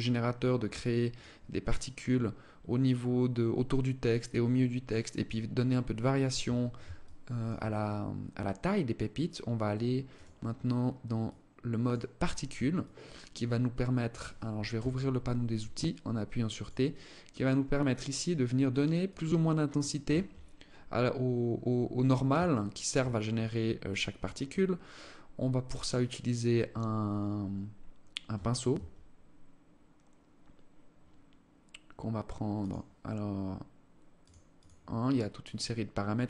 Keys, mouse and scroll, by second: 0.7 click, 6.5 alt+shift+click, 7.4 scroll up 1, 8.0 scroll down 1, 9.6 click, 12.2 alt+click, 14.2 t, 15.2 alt+click, 16.4 alt+click, 17.2 alt+click, 18.6 alt+click, 19.8 scroll up 2, 20.4 scroll down 1, 22.0 alt+shift+click, 23.0 alt+click, 27.8 Tab, 28.2 Tab, 32.1 click, 34.0 click.